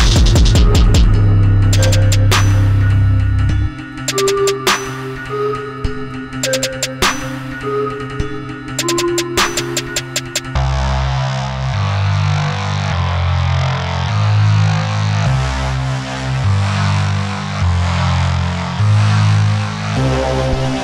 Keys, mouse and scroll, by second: 0.4 shift+middle click, 5.4 middle click, 5.8 scroll up 1, 6.4 middle click, 6.8 scroll down 1, 7.9 middle click, 8.0 middle click, 15.6 click, 19.9-20.3 scroll down 1.